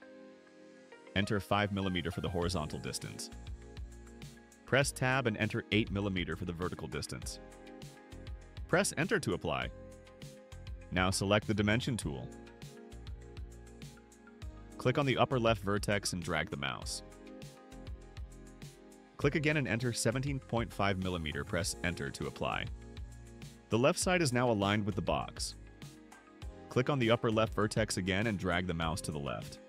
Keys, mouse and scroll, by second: 4.3 5, 5.5 Tab, 7.1 8, 8.7 Return, 12.3 click, 15.9 click, 19.8 click, 20.9-22.8 typing, 28.3 click.